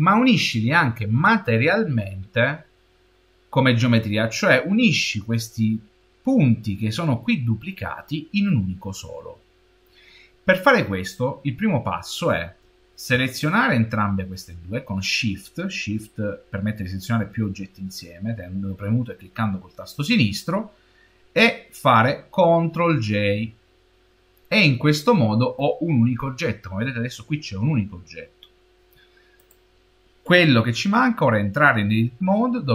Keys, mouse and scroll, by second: 13.2 shift+click, 22.8 ctrl+j, 29.2 click.